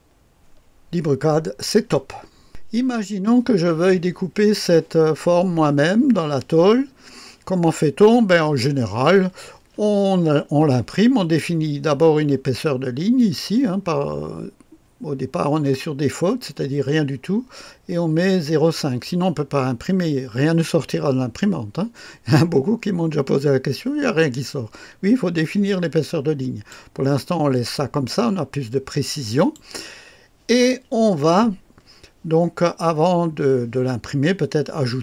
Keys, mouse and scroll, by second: 2.4 click, 13.2 click, 15.7-26.7 drag, 29.3 click.